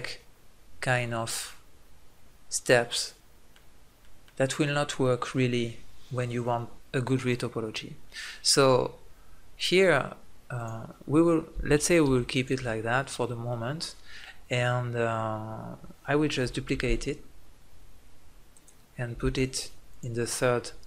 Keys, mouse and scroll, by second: 2.7-4.0 middle drag, 5.5-7.8 middle drag, 13.5-16.1 middle drag, 17.9 shift+d, 18.6-20.8 drag, 19.2 m.